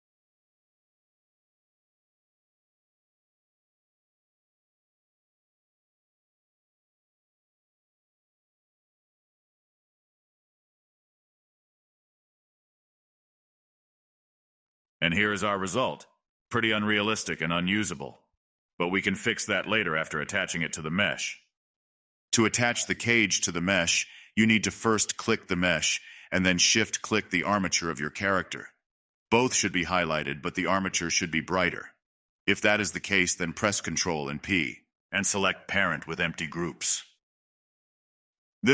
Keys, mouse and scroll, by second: 2.2-3.1 scroll down 3, 3.1-3.9 scroll down 3, 4.9-8.0 drag, 10.5 click, 10.9 middle drag, 11.2-11.8 scroll up 2, 11.8-12.4 shift+middle drag, 12.4 space, 13.5-16.2 middle drag, 16.2 space, 16.7 click, 17.1-17.7 middle drag, 17.7 click, 18.1 space, 18.3-21.0 middle drag, 21.0 space, 21.9 click, 22.2-23.3 middle drag, 23.3 click, 23.9-28.0 middle drag, 28.0 click, 28.9 shift+click, 29.5-30.5 shift+middle drag, 30.5 ctrl+p, 33.9-36.8 middle drag, 36.8 click, 37.9 click, 38.5 scroll up 2.